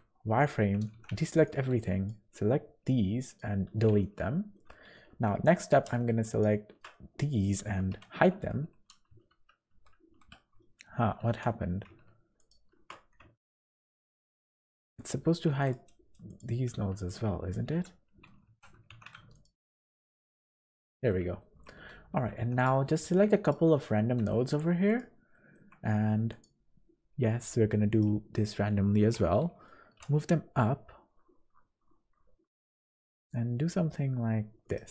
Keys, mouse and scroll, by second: 0.9 alt+a, 1.2 b, 2.7 x, 3.9 z, 4.5 middle click, 5.1 2, 5.5 middle click, 6.3 alt+shift+click, 6.9 middle click, 7.9 h, 8.5 1, 9.3 ctrl+z, 9.7 ctrl+z, 10.3 middle click, 11.2 2, 12.4 alt+shift+click, 13.3 alt+shift+click, 14.3 h, 15.0 middle click, 15.5 1, 15.6 click, 16.3 click, 16.8 ctrl+z, 17.1 ctrl+z, 17.5 ctrl+z, 18.5 1, 18.9 alt+a, 19.3 alt+shift+click, 20.3 h, 20.9 middle click, 21.4 shift+middle click, 21.9 middle click, 22.3 1, 22.6 click, 22.9 middle click, 23.4 shift+click, 23.8 middle click, 24.9 shift+click, 25.3 shift+middle click, 26.3 click, 29.9 middle click, 29.9 g.